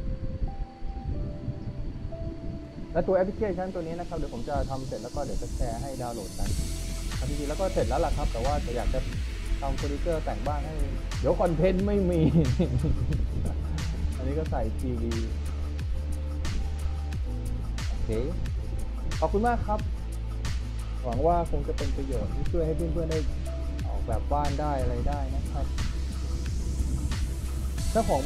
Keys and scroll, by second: 1.8-3.1 typing, 5.5 d, 5.9 w, 7.4-10.9 typing, 12.3 w, 14.8 a, 18.5 s, 24.8 w, 25.4 d, 26.1 w, 27.7 s.